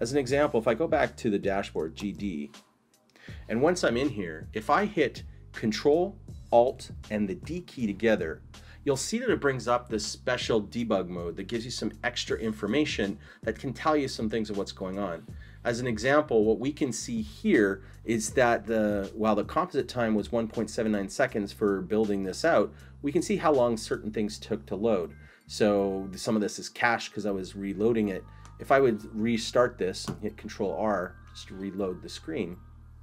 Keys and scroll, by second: 1.6-2.6 typing, 7.1 ctrl+alt+d.